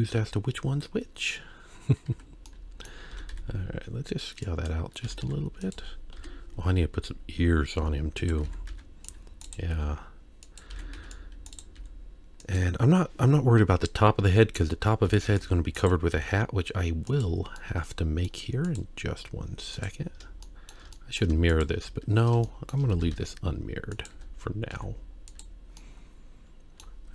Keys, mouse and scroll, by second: 0.0 z, 2.5 middle click, 3.1 s, 5.0 s, 6.1 KP_3, 6.7-7.3 scroll up 1, 7.8 z, 8.4 alt+a, 8.7 c, 9.7 g, 10.7 alt+a, 10.9 c, 11.8 g, 15.1 alt+a, 15.3 c, 16.1 g, 17.6 middle click, 18.6 click, 19.7 click, 20.4 shift+middle click, 20.9 middle click, 21.5 shift+click, 22.4 shift+middle click, 22.9 s, 24.2 z, 24.7 z, 25.8-26.9 middle drag.